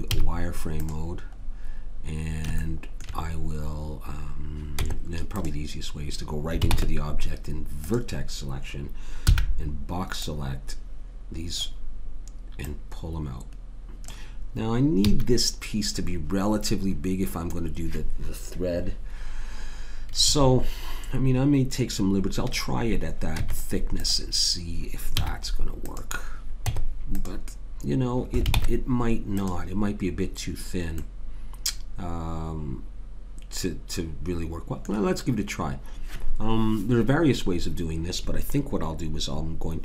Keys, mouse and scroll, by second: 0.1 z, 4.8 Tab, 6.7 ctrl+Tab, 9.3 b, 12.6 click, 15.1 a, 23.4 Tab, 25.2 z, 26.7 Tab, 28.5 ctrl+Tab, 31.0 middle click.